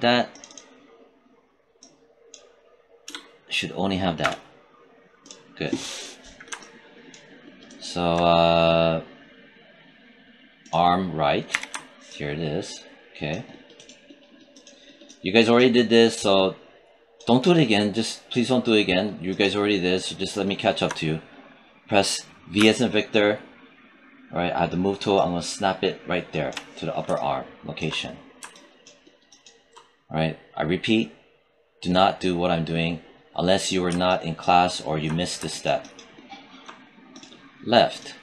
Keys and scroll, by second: 2.9 BackSpace, 4.1 Return, 11.4 w, 22.4 v.